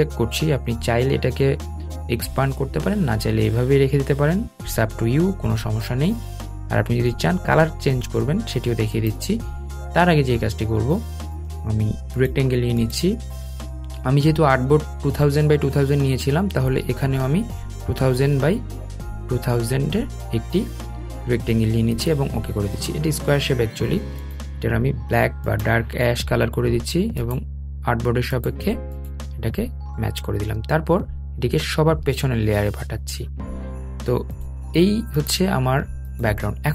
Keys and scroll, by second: 32.3 super+{.